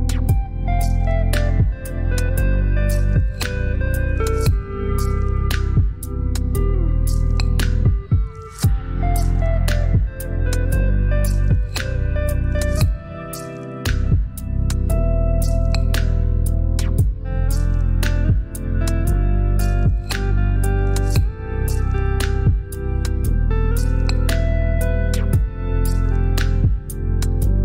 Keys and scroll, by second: 0.0 ctrl+j, 2.1 shift+Down, 3.8 shift+Up, 4.2 Down, 4.4 Down, 6.6 Up, 7.5 i, 10.8 typing, 11.6 ctrl+BackSpace, 13.8 ctrl+j, 16.1 shift+Down, 17.7 shift+Up, 18.1 Down, 18.3 Down, 20.1 i, 23.2 typing, 23.8 ctrl+BackSpace, 26.5 ctrl+j.